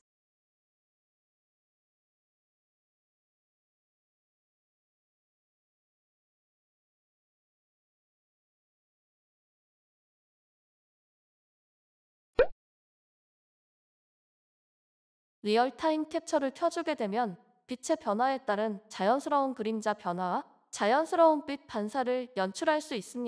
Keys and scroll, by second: 9.9-12.8 typing, 13.9 typing, 16.7-17.4 typing, 21.3 Return.